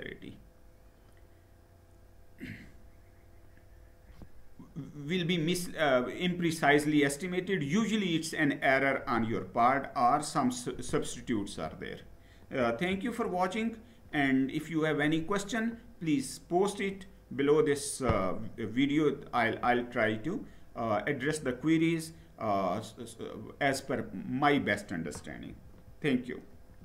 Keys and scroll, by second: 11.1 Down, 12.4 Up.